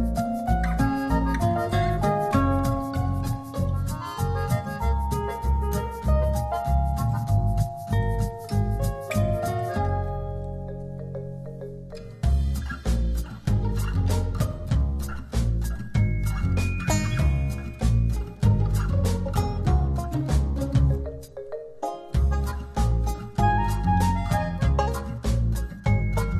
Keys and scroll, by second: 13.6 super+0, 18.0 super+z, 22.4 h, 23.2 z, 24.7 space, 25.5 z.